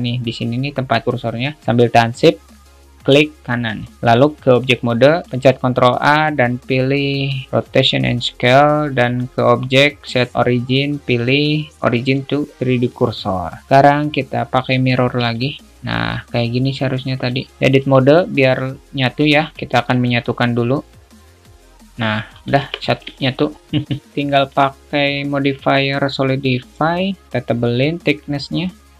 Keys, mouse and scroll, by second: 5.3 ctrl+a, 5.7 ctrl+a, 9.3-12.5 drag, 13.7-15.6 drag, 17.5 click, 19.6 a, 21.5-22.7 drag, 22.9 Tab, 23.4-24.8 alt+middle drag, 25.7-26.8 drag, 27.1 middle click, 28.0-28.9 drag.